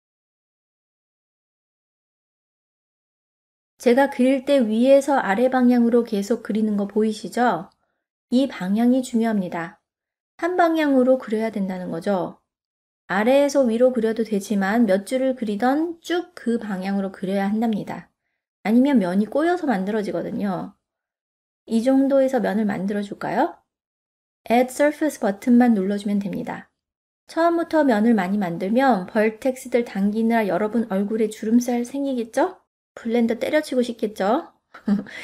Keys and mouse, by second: 3.4 click, 4.7 click, 5.8 click, 6.6 click, 7.4-8.7 middle drag, 9.1 click, 10.0 click, 11.2 middle click, 24.9-35.2 drag.